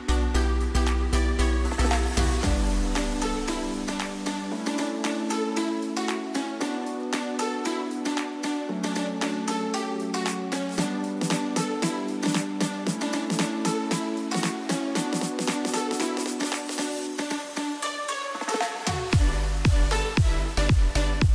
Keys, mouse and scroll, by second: 9.2 click, 11.7-13.7 scroll up 1, 13.7-19.5 drag, 20.5 alt+Num_Lock, 20.5-21.3 alt+drag.